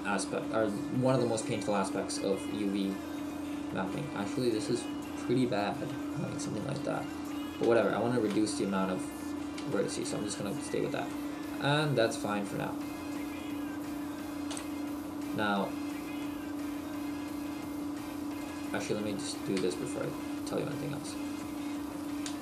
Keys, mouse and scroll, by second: 7.7 shift+middle click, 9.7 shift+middle click, 11.2 middle click, 14.5 KP_1, 16.2 shift+middle click, 18.4 right click, 18.9 right click, 19.7 shift+middle click, 20.5 Tab, 21.2 right click, 22.3 g.